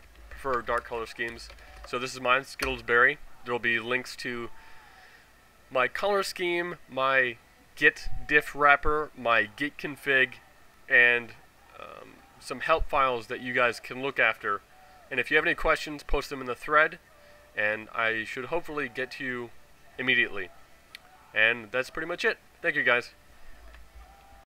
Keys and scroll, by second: 0.0-1.7 typing, 1.8 Tab, 2.6 Return, 23.6 ctrl+a, 23.9 0.